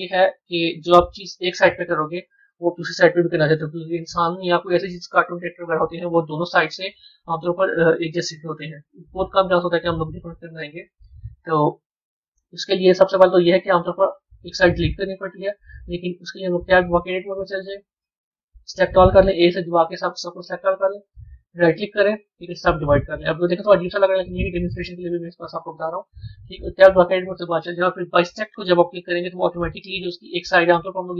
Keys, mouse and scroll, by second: 3.0 KP_1, 13.8 b, 15.4 Tab, 16.2 b, 16.8-18.0 middle drag, 21.3-23.5 right drag, 23.5-26.6 middle drag, 26.8 Tab, 30.4 b.